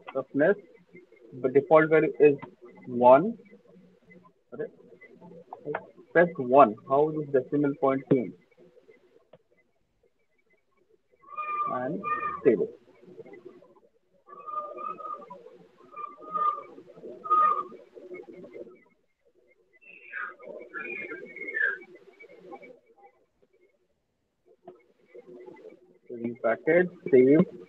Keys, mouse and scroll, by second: 0.0-1.6 typing, 2.6 typing, 2.8 click, 7.2-8.0 typing.